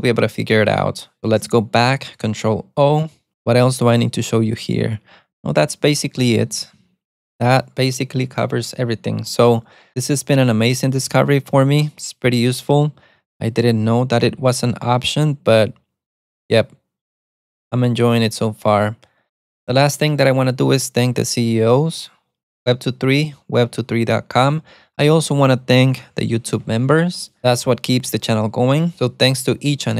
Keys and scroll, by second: 1.9 ctrl+o, 4.2 ctrl+d, 4.6 ctrl+d, 5.5 ctrl+u, 5.6 ctrl+u, 5.8 ctrl+u, 6.8 ctrl+d, 13.7-15.4 typing.